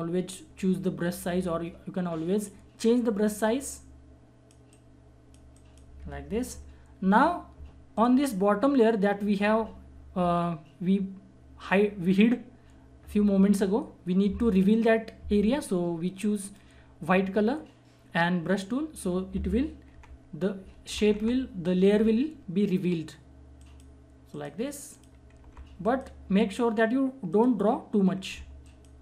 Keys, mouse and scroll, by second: 6.4 ctrl+-, 7.9 click, 16.4 click, 19.9-21.9 typing, 23.5 click, 24.9 click, 25.4 typing, 25.8 click, 28.3 [, 28.6 click.